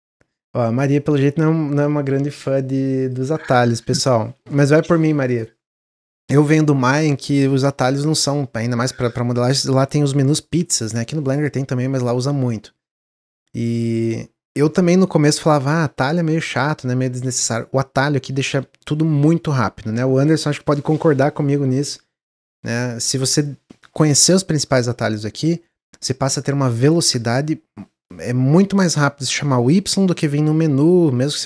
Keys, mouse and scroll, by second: 0.8-3.8 drag, 3.8 click.